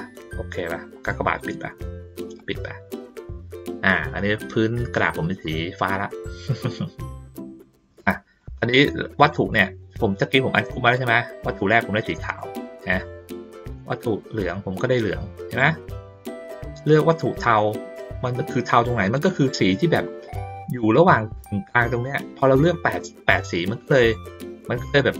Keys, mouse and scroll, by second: 1.2 click, 2.4 click, 3.9 click, 5.4 ctrl+middle click, 5.7 ctrl+middle click, 6.7 ctrl+middle click, 7.5 ctrl+middle click, 8.0 middle click, 9.3 click, 10.1 middle click, 10.9-12.1 drag, 12.4-13.0 drag, 13.9-15.6 drag, 16.3-19.1 drag, 19.8 ctrl+middle click, 22.8 middle click, 23.3 ctrl+middle click, 23.6 ctrl+middle click, 24.1 middle click.